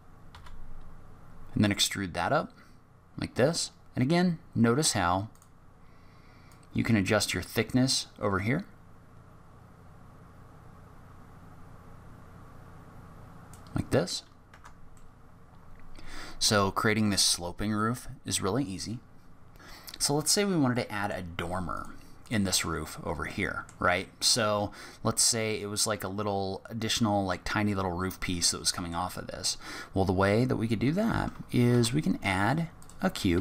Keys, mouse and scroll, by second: 0.3 e, 6.4 click, 14.5 Tab, 14.9 middle click, 20.6 scroll down 1, 20.7 middle click, 21.5 scroll up 1, 21.7 click, 22.2 click, 22.6 scroll up 3, 23.3 middle click, 24.3-25.6 scroll down 1, 27.8-28.4 scroll up 2, 28.4 middle click, 31.7 shift+a, 33.3 g.